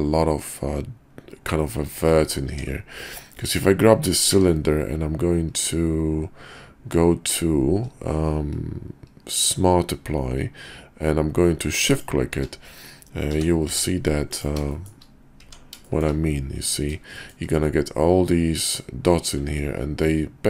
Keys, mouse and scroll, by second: 2.5 Tab, 3.4 click, 4.2 q, 13.2 g, 14.8 shift+middle click, 15.4 Tab, 15.8 shift+click, 16.6 click, 17.1 shift+middle click, 20.0-20.4 middle drag.